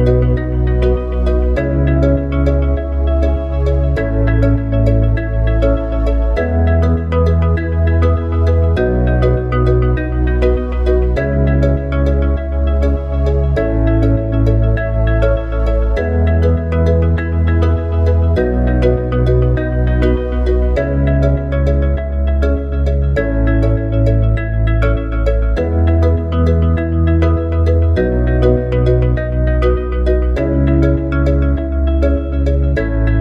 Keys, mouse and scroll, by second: 3.2 shift+a, 4.5 click, 6.4 KP_1, 8.2 s, 11.1 click, 12.9 s, 16.6 click, 18.6 s, 26.3 click.